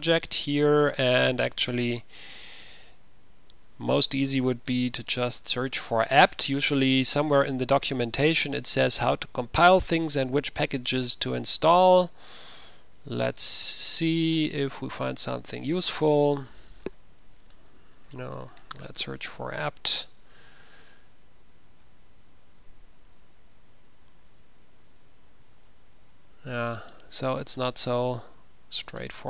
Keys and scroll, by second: 4.6-5.5 typing, 6.1 Return, 16.5 ctrl+f, 16.6 ctrl+v, 17.8 ctrl+a, 18.3-19.5 typing, 23.6 c, 25.3 c.